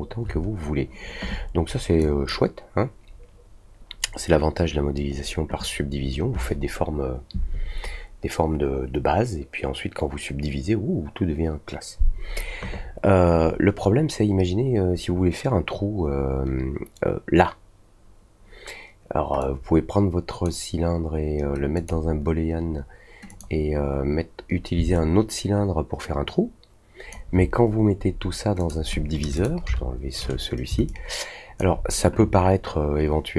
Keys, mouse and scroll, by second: 1.9 drag, 19.3-20.4 drag, 21.7 click, 23.2 click, 24.9-27.0 alt+drag, 28.5 click, 29.3 click, 30.8-31.5 alt+drag.